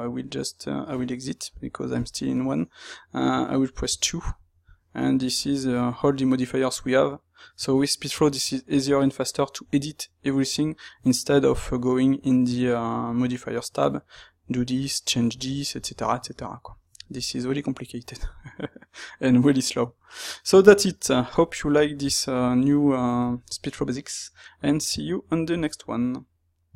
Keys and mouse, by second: 2.2 click, 2.3-26.7 middle drag, 3.8 '.